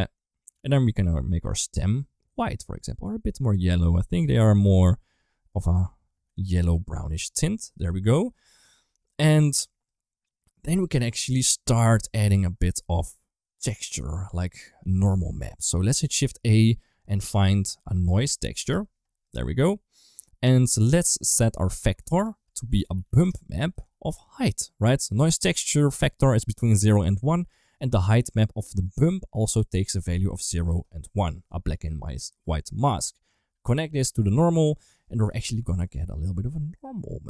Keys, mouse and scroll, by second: 1.3 click, 5.4 middle click, 6.8 ctrl+s, 7.5 shift+middle click, 8.5 middle click, 9.1 click, 9.9 click, 12.4 middle click, 14.8 middle click, 16.1 shift+a, 21.5-23.7 drag, 24.1-24.5 drag, 25.1 middle click, 26.6 middle click, 27.5 click, 28.4 middle click, 28.7 click, 28.9 click, 32.1 middle click, 33.9 click, 35.8 middle click.